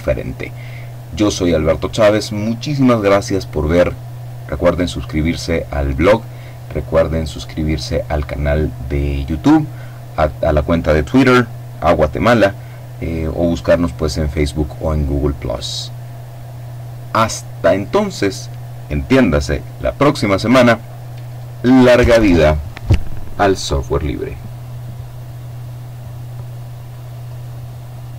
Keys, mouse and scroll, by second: 26.6 click, 28.0 click.